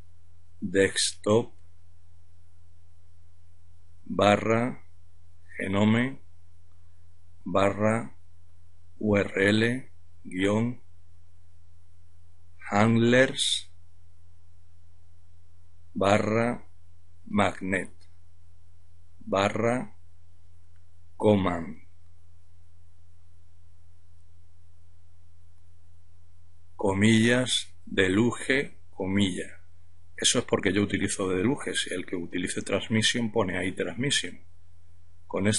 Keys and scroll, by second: 0.0-1.5 typing, 2.9-13.0 typing, 14.8-26.6 typing.